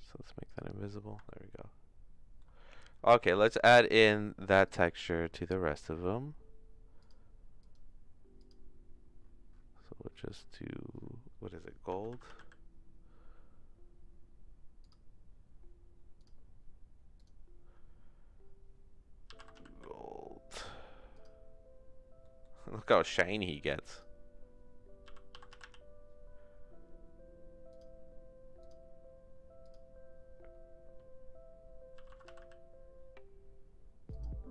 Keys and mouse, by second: 0.4 click, 1.2-2.4 shift+middle drag, 3.5 click, 7.0 click, 7.6 click, 8.4 click, 17.2-21.2 drag, 22.2 middle click, 23.9 click, 28.6 click, 29.6 click.